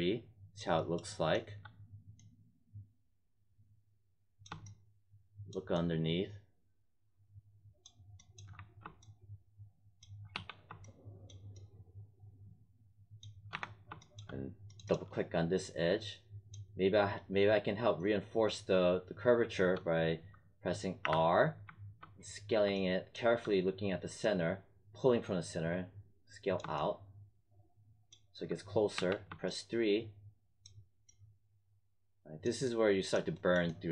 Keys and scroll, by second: 8.5 1, 10.3 3, 13.5 1, 21.0 r, 28.9 3.